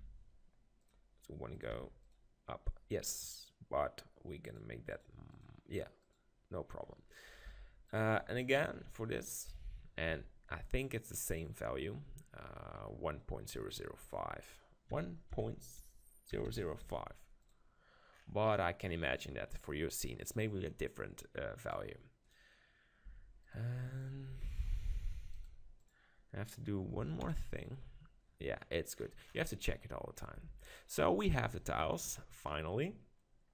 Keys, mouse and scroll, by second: 1.5-3.4 drag, 4.4-9.2 drag, 7.5 Tab, 10.1 Tab, 14.0-16.0 drag, 16.4 0, 18.1 middle click, 21.6-23.8 drag, 23.1 Tab, 23.4 right click, 24.1 click, 24.4 Tab, 25.0 Tab, 25.0 click, 27.3 alt+Home, 27.8 middle click, 30.4 Tab.